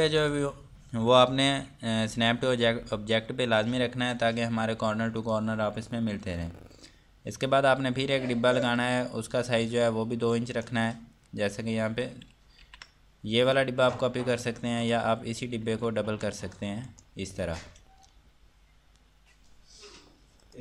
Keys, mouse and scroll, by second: 4.1 click, 6.8-8.9 scroll down 1, 8.9 click, 10.6 ctrl+right click, 13.5 click, 16.9 ctrl+right click, 20.5 click.